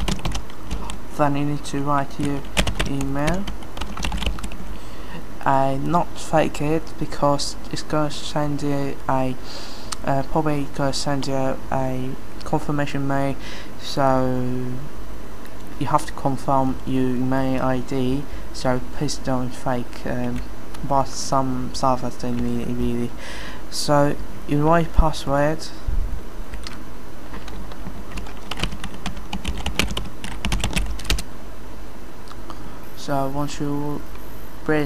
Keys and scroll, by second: 0.0-0.7 typing, 2.3-5.1 typing, 27.7-31.3 typing, 32.6 typing.